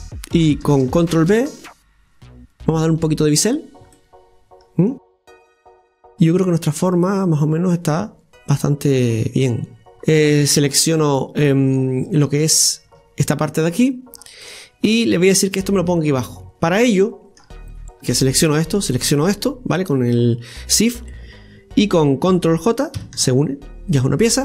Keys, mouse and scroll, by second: 0.9 ctrl+b, 3.6 scroll down 1, 4.0-5.0 middle drag, 5.0-6.1 scroll down 3, 6.1 Tab, 6.1-6.4 scroll down 1, 6.9 scroll down 1, 6.9-9.9 middle drag, 9.9-10.8 scroll up 4, 11.2-12.0 scroll up 1, 12.0 right click, 12.9-14.2 scroll down 2, 14.2 scroll down 1, 14.4-18.0 middle drag, 18.0 right click, 19.0 shift+right click, 23.0 ctrl+j.